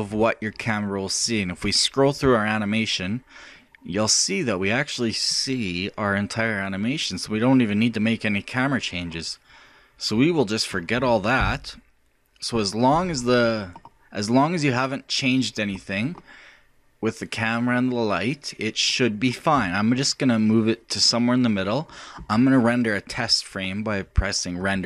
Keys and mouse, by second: 2.1-3.8 drag, 3.8-11.4 middle drag, 11.4 KP_0, 13.6-14.8 middle drag, 14.8 middle click, 20.6-22.4 drag, 24.6 middle click.